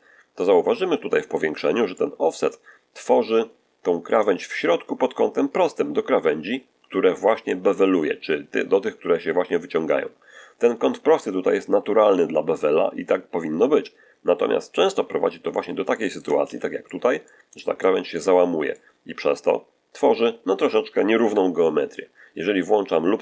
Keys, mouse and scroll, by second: 0.8-1.6 scroll up 4, 1.8 shift+middle click, 14.6-15.1 scroll down 2, 15.2-15.8 scroll down 3, 15.8 shift+middle click, 16.3 shift+z, 16.7 shift+middle click, 17.4-18.8 shift+middle drag, 21.1 1.